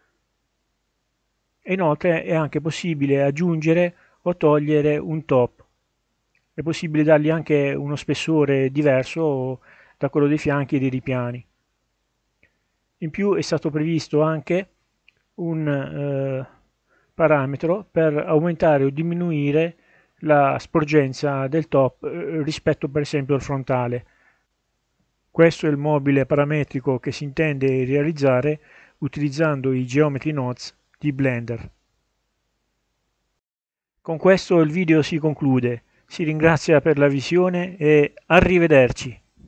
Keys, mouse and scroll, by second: 1.3 click, 4.2 click, 6.5 click, 8.5-14.2 drag, 15.2-21.1 drag, 21.2-22.5 drag, 24.2-26.1 drag, 27.5-29.1 drag, 30.7-31.7 middle drag, 31.7-32.2 scroll up 2, 32.2-33.6 scroll down 1.